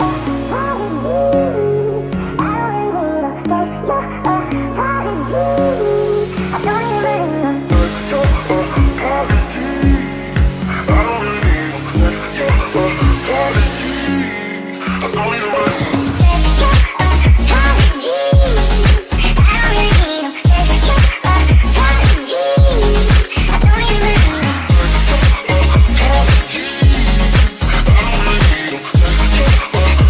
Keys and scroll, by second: 12.2-14.0 typing, 16.5-21.6 typing.